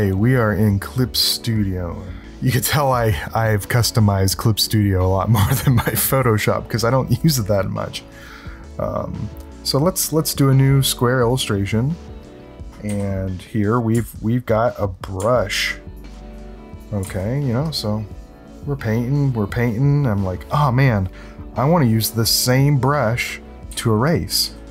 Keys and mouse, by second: 8.1 click, 11.2 click, 12.8 s, 15.3 ctrl+alt+click, 16.3 click, 17.0 ctrl+z, 17.6-19.6 drag, 23.7 x.